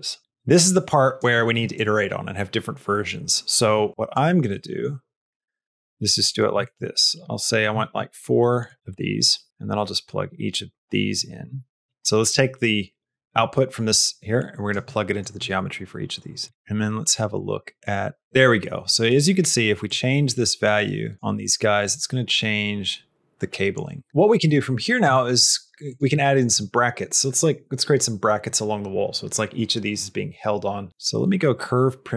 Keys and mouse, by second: 0.4 click, 3.9 shift+click, 4.5 middle click, 5.3 shift+d, 6.5 shift+d, 7.4 click, 7.7 shift+d, 9.4-10.6 drag, 9.4 x, 11.8-14.6 drag, 14.7 middle click, 16.3 click, 16.5 x, 17.2-19.0 drag, 19.8-21.1 shift+drag, 21.8-24.1 shift+drag, 24.1 middle click, 24.3 shift+middle click, 24.6 middle click, 25.0 shift+middle click, 25.8 click, 26.1 middle click.